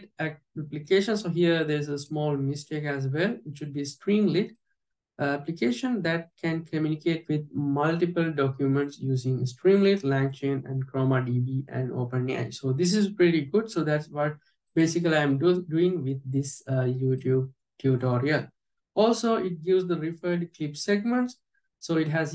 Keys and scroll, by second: 17.3 alt+j.